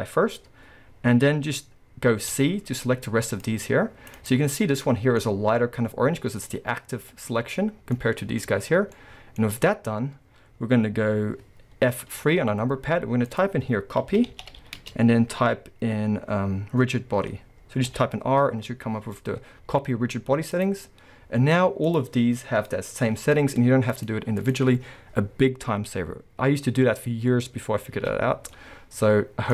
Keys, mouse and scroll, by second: 2.3 c, 4.3 right click, 4.4-4.9 scroll up 1, 4.9-21.9 middle drag, 8.7 scroll down 1, 9.4 scroll up 1, 12.1 F3, 21.1-21.9 scroll down 1, 21.9 click, 23.5 scroll up 1, 23.9 click, 24.4 click, 24.7 scroll down 1, 27.9 alt+a, 28.1-28.5 scroll down 1, 28.5-29.5 middle drag.